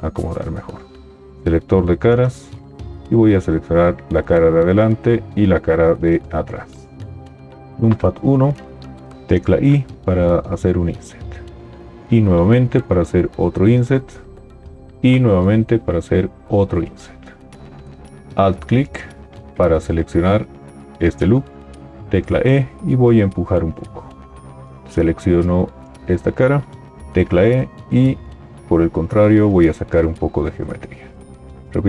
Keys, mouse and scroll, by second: 0.1 g, 7.7 KP_1, 9.2 i, 12.1 i, 15.1 i, 18.3 alt+click, 22.3 e, 27.1 e.